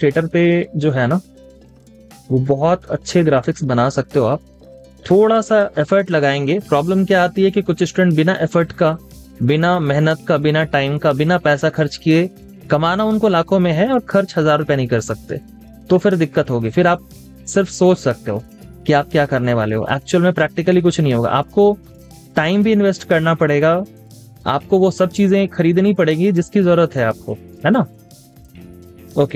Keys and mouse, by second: 4.0 space, 4.2 double click, 4.5 space, 5.2 double click, 11.8 space.